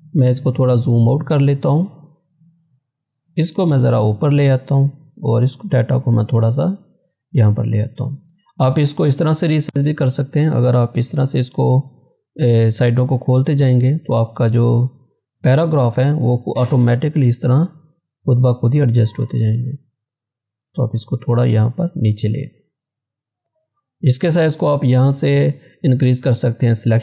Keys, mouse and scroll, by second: 1.4 scroll up 1, 2.7-7.9 drag, 7.9 scroll down 1, 9.5-14.0 drag, 14.2-16.9 drag, 16.9 scroll down 1, 17.7-18.1 scroll up 1, 19.3 scroll down 1, 19.8 scroll up 1, 20.7-23.3 drag, 24.2 click, 24.3 click.